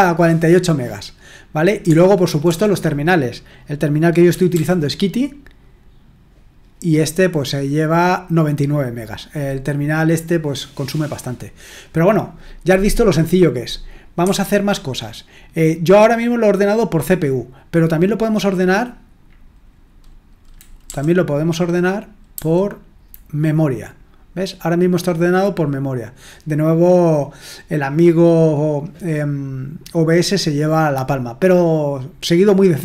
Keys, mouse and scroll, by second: 1.8 BackSpace, 2.4 BackSpace, 4.2-5.0 typing, 14.2 Escape, 20.8 Down.